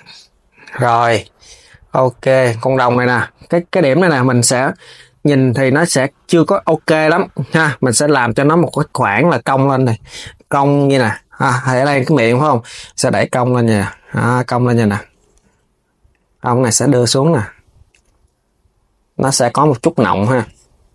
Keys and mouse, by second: 1.8 click, 2.1 KP_3, 15.8 click, 16.0 KP_3, 16.3 g.